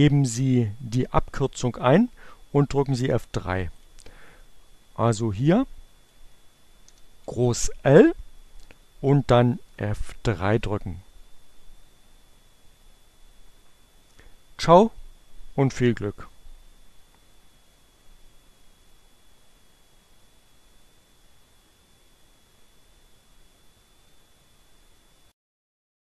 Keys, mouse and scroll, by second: 3.2 click, 3.8-5.5 drag, 6.0 shift+l, 8.1 F3.